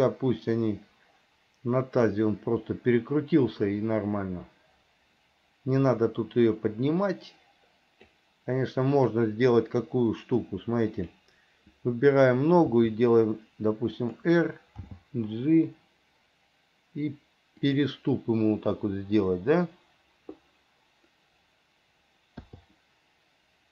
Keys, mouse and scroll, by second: 11.2 click, 12.8 r, 15.0 g.